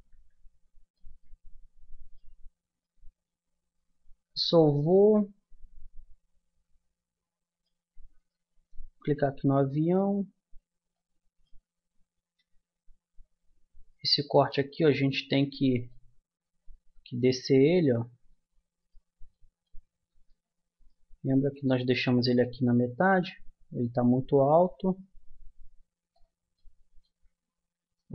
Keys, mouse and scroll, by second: 4.1-7.3 middle drag, 8.2-9.5 right drag, 8.7 Tab, 13.9-18.8 middle drag, 18.8-22.1 drag, 22.1 middle click, 22.6-23.9 drag, 26.5-27.9 drag, 27.9 ctrl+z.